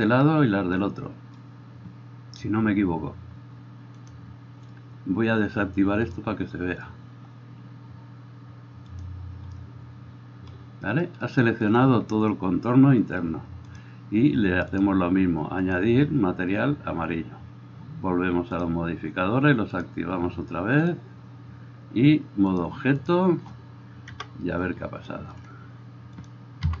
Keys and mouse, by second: 4.1-9.7 drag, 13.7-26.4 drag, 24.2 KP_0, 25.5-26.8 middle drag.